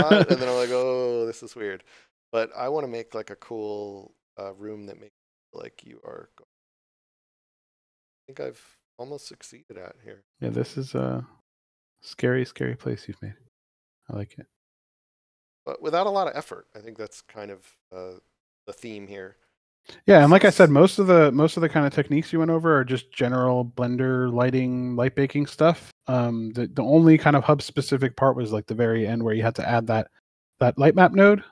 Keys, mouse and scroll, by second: 2.7 w, 9.1 shift+a, 18.9 a, 18.9 s, 21.9 shift+d.